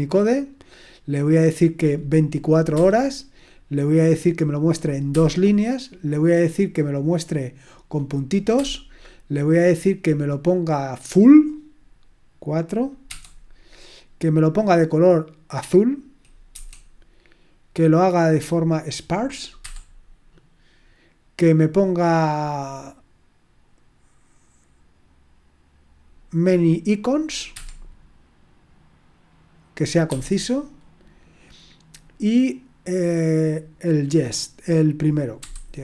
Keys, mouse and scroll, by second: 2.7 2, 5.1 2, 8.5 2, 13.0 4, 16.5 4, 19.6 2, 27.5 2, 30.1 1, 35.4 y.